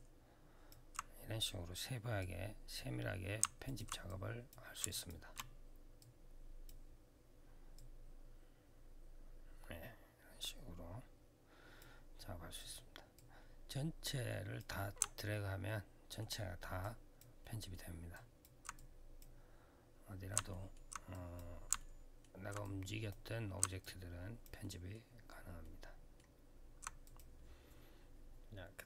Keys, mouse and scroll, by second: 0.4 click, 1.9 click, 3.4 alt+click, 3.8 click, 4.6 shift+click, 5.7 click, 7.5 click, 12.3 click, 12.5 click, 12.9 click, 15.4 alt+middle click, 16.2-16.6 alt+scroll down 1, 16.6 alt+click, 17.2 alt+middle click, 17.9 alt+click, 18.5 click, 20.3 alt+middle click, 20.9 click, 21.5 alt+middle click, 22.4 click, 23.6 alt+click, 24.4 alt+middle click, 24.9 alt+scroll down 1, 25.4 alt+middle click, 26.1 alt+scroll down 1, 26.8 click.